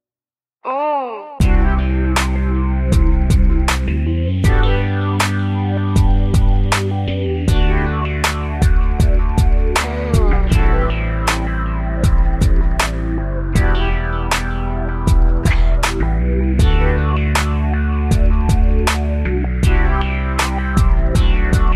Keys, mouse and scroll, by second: 0.3 shift+middle click, 1.1 middle click, 2.4 click, 3.4 Escape, 4.0 middle click, 4.7 scroll down 1, 5.3 middle click, 6.9 click, 8.4 ctrl+c, 8.7 ctrl+shift+v, 10.3 Down, 10.7 Down, 11.1 Right, 11.4 Right, 11.6 Right, 13.1 Down, 15.0 shift+middle click, 15.4 middle click, 16.1 middle click, 16.2 middle click, 17.5 click, 17.5 middle click, 19.4 ctrl+c, 19.7 ctrl+shift+v, 20.3 Down, 20.8 Right, 21.1 Right, 21.3 Right.